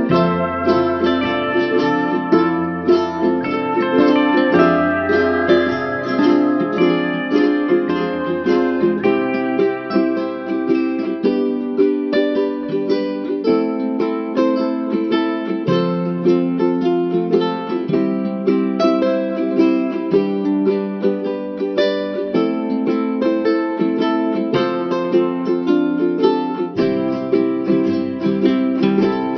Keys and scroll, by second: 5.2 ctrl+z, 6.0 ctrl+alt+z, 11.9 ctrl+alt+shift+n, 29.0 ctrl+=.